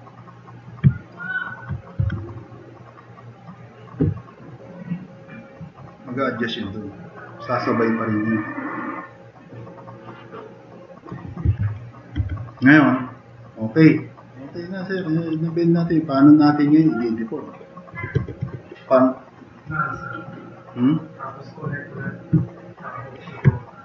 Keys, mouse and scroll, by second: 0.1 drag, 2.0 e, 5.6 click, 6.6 drag, 6.9 click, 7.3 drag, 7.5 click, 7.8-8.4 drag, 8.5 drag, 8.7 drag, 10.6 click, 11.4 4, 12.2 e.